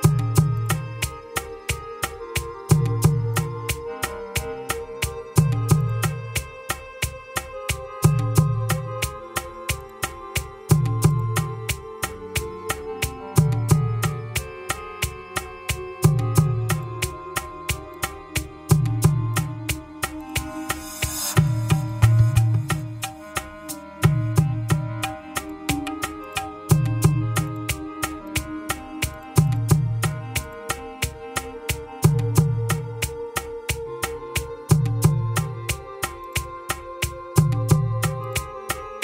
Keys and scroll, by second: 23.8 Return.